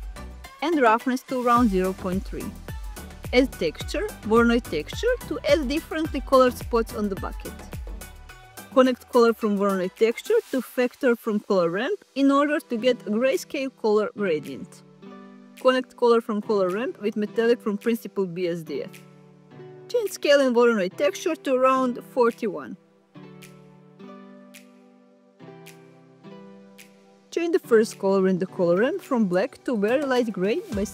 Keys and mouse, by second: 2.5-4.7 drag, 7.4 drag, 11.3 click, 12.1 click, 13.6 click, 14.9 click, 20.6 click, 22.5-24.6 drag.